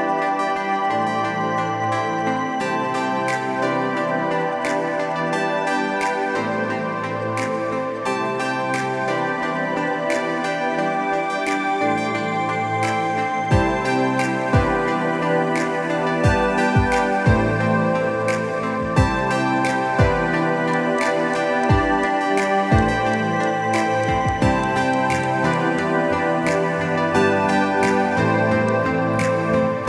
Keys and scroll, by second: 3.2 ctrl+=, 3.4 ctrl+=, 3.5 ctrl+=, 5.5 ctrl+z, 6.1 ctrl+=, 10.1 ctrl+z, 10.4 ctrl+z, 12.7 ctrl+z, 26.1 ctrl+-, 26.4 ctrl+-, 26.7 ctrl+-, 26.7 ctrl+-, 27.1 ctrl+-, 29.6 ctrl+Return.